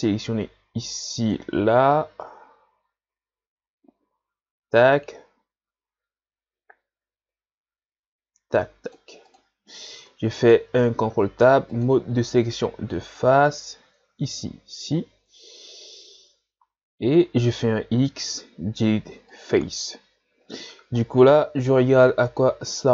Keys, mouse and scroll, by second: 10.9 ctrl+Tab, 12.8 c, 18.2 x, 20.5 z, 21.1-22.0 scroll down 1, 22.0 scroll up 4.